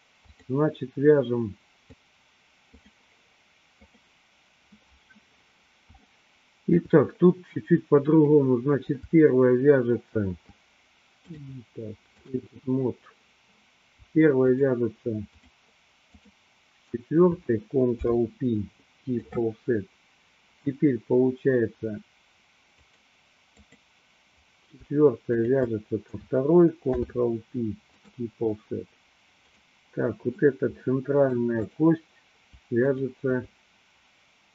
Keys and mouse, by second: 0.5 click, 1.9-4.2 drag, 6.1 shift+middle click, 11.3-12.4 drag, 14.5 shift+click, 15.4 shift+click, 17.9 ctrl+p, 22.8 click, 23.6 click, 25.4 shift+click, 26.8 ctrl+p, 30.3-31.6 middle drag, 31.8 click.